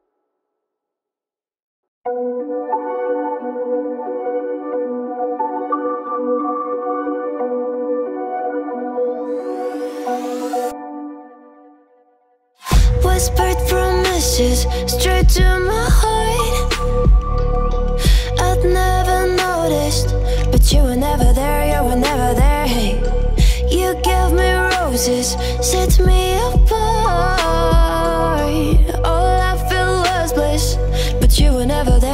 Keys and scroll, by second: 21.1-24.7 typing.